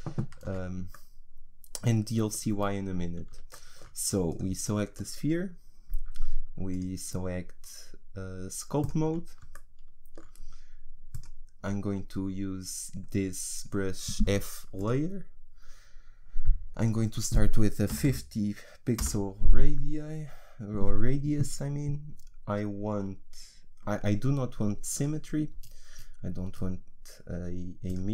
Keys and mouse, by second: 0.5 z, 4.4-6.1 right drag, 11.1-13.3 drag, 16.8-28.1 drag.